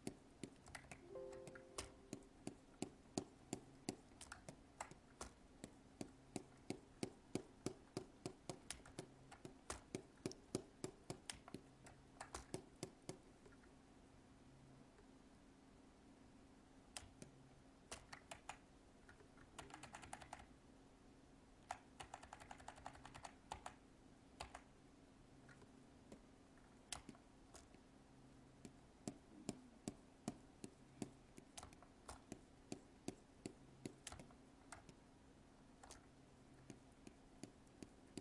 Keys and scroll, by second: 4.3 alt+space, 8.8 alt+space, 18.2 ctrl+z, 34.7 alt+space.